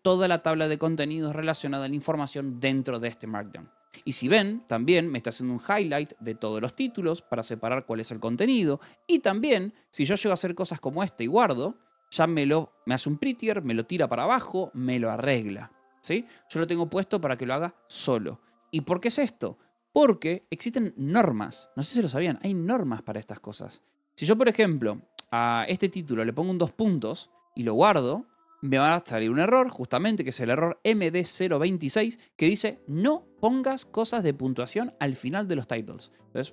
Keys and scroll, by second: 0.0-2.3 typing, 4.1-7.3 typing, 5.8 Escape, 8.8 l, 9.3 BackSpace, 9.7 space, 10.0 Escape, 11.5 ctrl+s, 16.4 k, 18.7-20.6 typing, 22.0 j, 23.4 k, 25.6 a, 26.6 Escape, 28.0 ctrl+s.